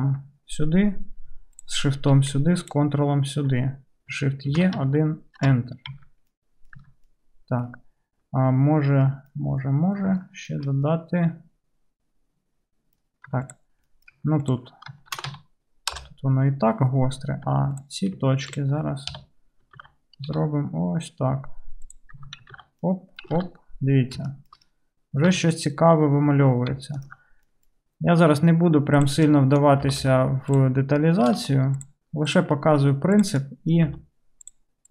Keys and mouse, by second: 1.6 shift+middle click, 4.5 shift+e, 5.9 Tab, 6.9 Tab, 13.3 2, 13.5 click, 14.5 ctrl+click, 14.6-18.5 ctrl+shift+right drag, 15.2 shift+e, 18.5 ctrl+middle click, 18.7 ctrl+right click, 18.9-20.0 drag, 19.1 KP_3, 19.9 alt+z, 20.0-21.6 right drag, 20.3 alt+g, 21.6-26.5 drag, 22.3 Tab, 22.6 alt+z, 23.4 alt+z, 25.4 Tab, 26.5 right click, 27.0 alt+middle click, 27.3-29.9 right drag, 29.9 g, 29.9-34.9 drag, 31.4 g, 32.4 middle click, 32.4 right click, 34.0 g.